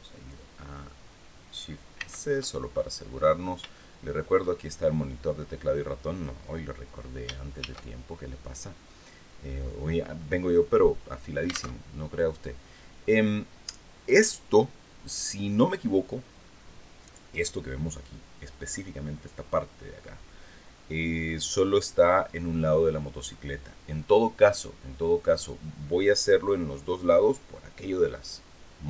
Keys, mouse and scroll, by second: 1.5 shift+c, 2.2-2.9 shift+scroll up 5, 3.2 shift+middle click, 7.1 shift+a, 9.1 click, 11.2 alt+Tab.